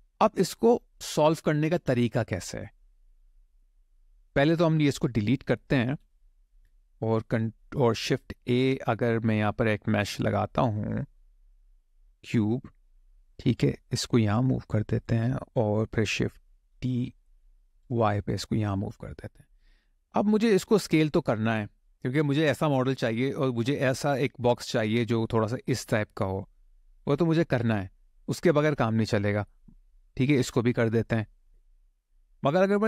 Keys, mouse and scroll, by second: 3.8 click, 4.8 Delete, 5.0 click, 5.2 Delete, 5.5 click, 5.7 Delete, 8.2 shift+a, 14.1 click, 16.3 shift+d, 17.5 y, 18.6 click, 19.3 click, 19.9 click, 20.4 middle click, 23.5 click, 24.9 click, 26.2 click, 27.3 click, 27.9 middle click, 30.1 click, 32.2 click.